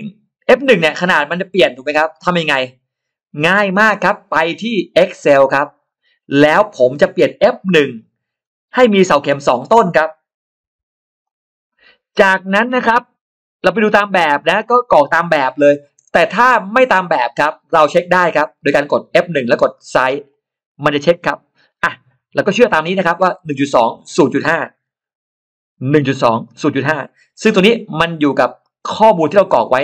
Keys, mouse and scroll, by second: 4.9 click, 9.3 click, 10.5 2, 11.1 click, 13.9 click, 16.1 click, 17.4 click, 20.1 click, 22.5 click, 24.0 click, 25.9 click, 26.4 click.